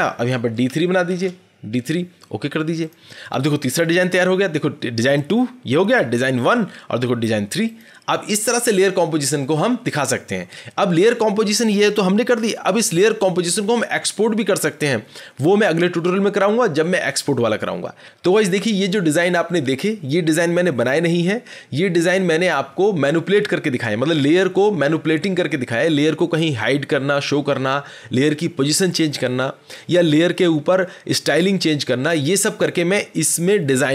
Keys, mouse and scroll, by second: 1.0 d, 1.6 d, 2.8 click, 5.1 click, 6.4 click, 7.7 click.